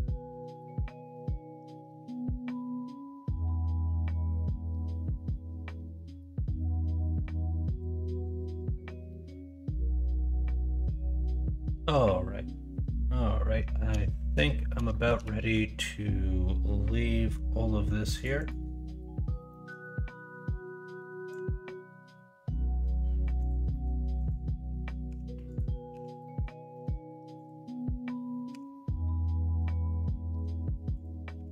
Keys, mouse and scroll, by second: 0.2 ctrl+z, 0.8 s, 3.1 middle click, 3.8 scroll up 1, 3.9 middle click, 4.9 middle click, 5.2 scroll down 1, 5.6 scroll up 1, 5.8 scroll down 1, 6.1 scroll up 1, 6.2 middle click, 6.5-7.1 scroll down 1, 7.1-7.8 scroll down 1, 7.8 scroll down 1, 8.0 scroll up 1, 8.2 middle click, 8.5 middle click, 8.8 scroll down 1, 9.2 scroll up 1, 9.4-10.0 scroll down 1, 10.0 middle click, 10.5 Tab, 11.4 middle drag, 13.5 middle drag, 14.1 shift+middle drag, 14.4 middle click, 14.9 shift+middle drag, 15.3 middle click, 19.5 middle drag, 23.7 middle click, 25.0 h, 25.9 h, 26.2 middle drag, 26.7 middle click, 28.5 h, 28.8-29.6 middle drag, 29.9-30.4 middle drag, 31.3 h.